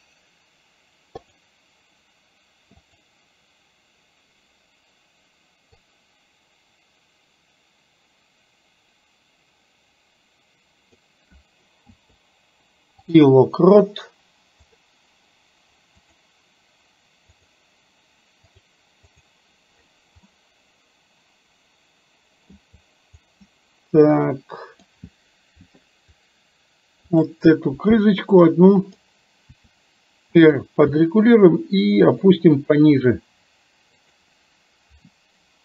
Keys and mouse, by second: 1.3 click, 2.9 click, 5.9-11.0 drag, 11.9 i, 14.6 click, 16.2 click, 17.5 click, 18.6 click, 19.2 click, 20.3-22.5 middle drag, 23.5-24.9 middle drag, 27.2 click, 28.6 middle click, 29.5 r, 30.9 g, 32.9 r.